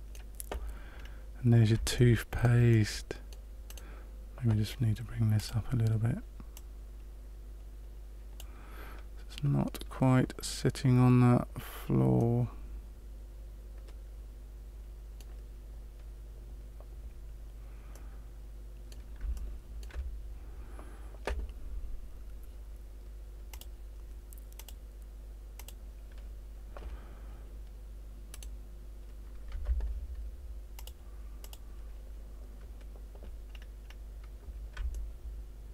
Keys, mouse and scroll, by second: 1.0 scroll up 2, 1.9 shift+middle click, 2.6 middle click, 3.6 right click, 5.3 click, 6.5 click, 12.1 middle click, 17.9 middle click, 19.3 shift+middle click, 23.4 click, 24.5 click, 25.5 click, 28.2 right click, 29.5 Tab, 30.7 click, 31.4 click, 33.6-34.0 scroll up 3, 34.9 shift+middle click.